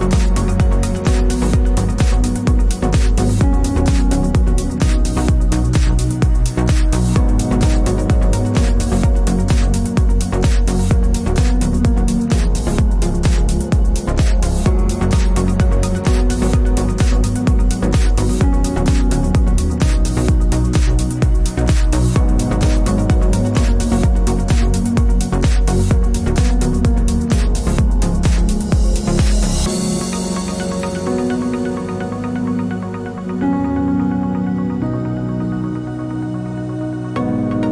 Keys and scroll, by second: 0.0-0.1 typing, 0.2 super+d, 10.6 Tab, 10.9 Tab, 29.7 Left, 29.9 Left, 30.1 shift+Tab, 30.5 shift+Tab, 31.9 super+d.